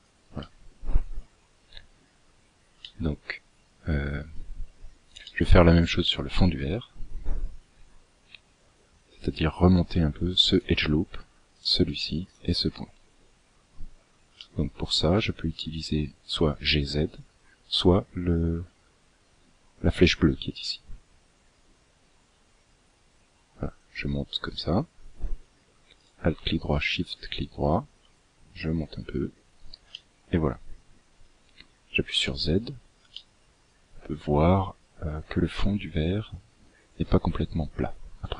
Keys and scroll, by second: 31.2 z.